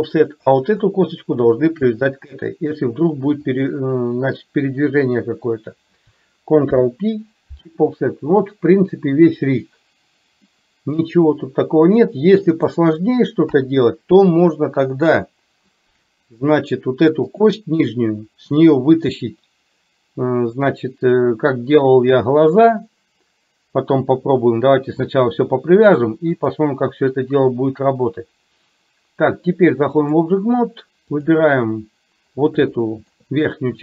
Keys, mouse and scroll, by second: 0.4 click, 1.9 click, 3.5 shift+click, 6.7 ctrl+p, 10.6-12.7 middle drag, 13.6 KP_3, 14.7 middle click, 17.4 click, 26.0 click, 26.6-30.4 drag, 32.9-33.2 shift+middle drag.